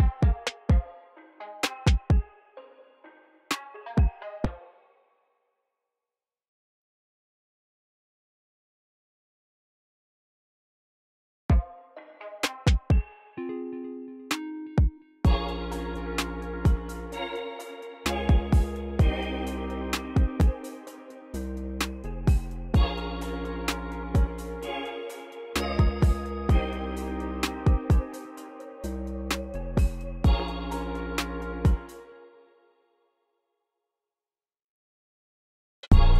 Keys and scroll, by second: 0.0 u, 0.4 l, 0.7 super+c, 2.2-5.7 typing, 3.0 super+v, 4.3 super+z, 8.4 super+c, 8.9-10.1 typing, 13.8 super+z, 16.7 u, 17.3 ctrl+super+r, 17.6 c, 18.4 super+a, 18.7 u, 19.3 m, 19.7 BackSpace, 22.7 alt+super+s, 23.6 y, 25.5-27.8 typing, 30.9 y, 31.4 space, 33.7-36.1 typing.